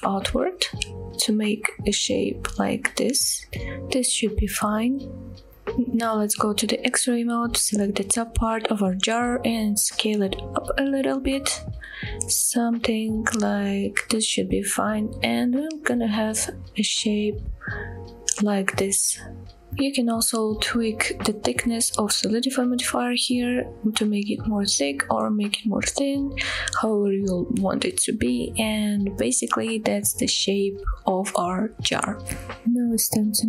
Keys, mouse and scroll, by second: 3.7 click, 3.9 middle click, 5.1 middle click, 5.5 KP_1, 5.7 click, 6.6-7.6 drag, 8.1-8.5 scroll down 1, 9.1 scroll up 1, 9.6 shift+middle click, 10.5 s, 14.0 click, 14.2-14.6 scroll down 2, 14.6 middle click, 15.9 click, 16.3 scroll down 1, 16.5 click, 16.8 middle click, 17.3-17.9 scroll up 5, 17.9 middle click, 18.4 scroll down 2, 18.8 middle click, 19.3 shift+middle click, 19.7 Tab, 19.7 middle click, 19.7 click, 19.7 scroll down 1, 22.1-24.3 shift+drag, 24.5-24.9 middle drag, 25.0 scroll up 1, 25.3-26.0 middle drag, 27.7-29.1 shift+drag, 29.3 click, 29.5-29.8 scroll down 2, 29.8-30.5 middle drag, 30.9 shift+middle drag, 31.6 shift+middle drag, 32.0-32.3 middle drag, 32.3 scroll down 1, 32.4-32.8 middle drag.